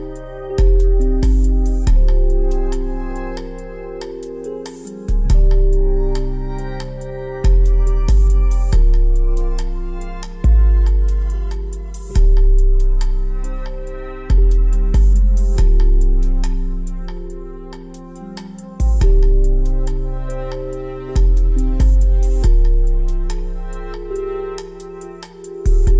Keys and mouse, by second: 15.1 ctrl+shift+c.